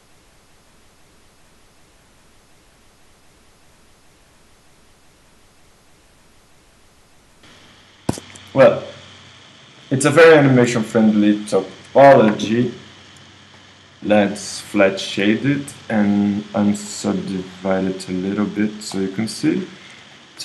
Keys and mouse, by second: 2.5-4.7 right drag, 4.7 middle click, 5.5-7.4 right drag, 7.4 middle click, 7.5-13.6 right drag, 14.9-16.1 drag, 17.0-19.2 drag, 19.2-20.4 middle drag.